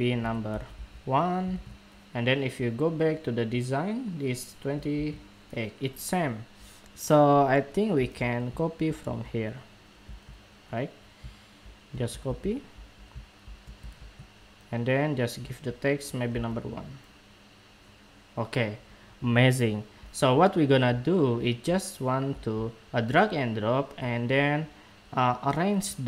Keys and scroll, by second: 1.2 super+Tab, 5.2 super+Tab, 11.9 super+c, 13.7 super+v.